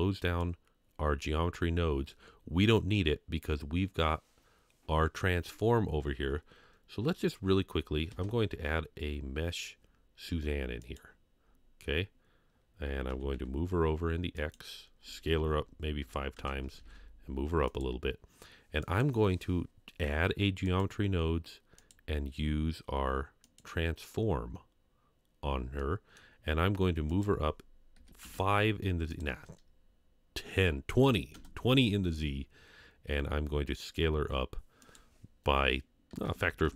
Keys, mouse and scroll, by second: 7.0-7.4 scroll down 1, 7.4 scroll up 2, 8.1 shift+a, 11.4-13.1 scroll down 1, 13.1 g, 15.3 s, 16.7 g, 20.8 click, 23.6 drag, 25.8 middle click, 27.1-28.2 drag, 29.1-31.4 drag, 34.8-36.7 drag.